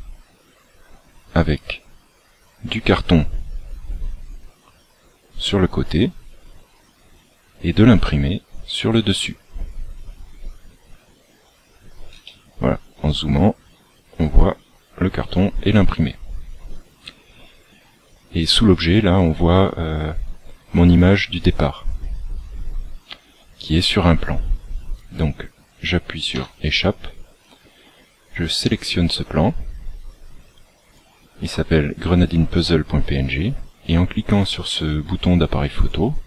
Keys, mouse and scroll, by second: 26.3 Escape, 27.0-27.9 scroll down 13, 28.6 right click, 30.0 click, 35.7 click.